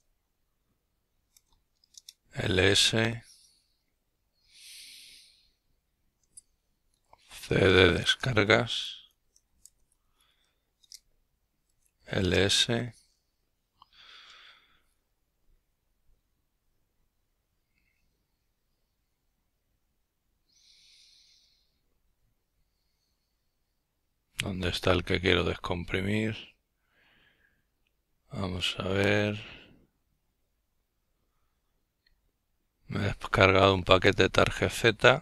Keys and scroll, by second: 0.0-3.8 typing.